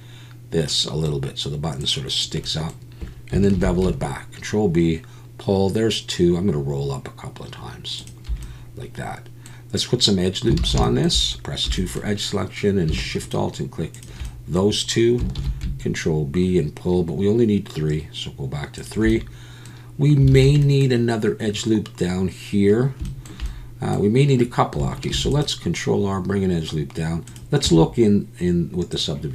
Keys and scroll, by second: 3.5 ctrl+b, 10.6 alt+a, 11.7 2, 15.4 ctrl+b, 20.3 alt+a, 25.1 ctrl+r, 27.6 Tab.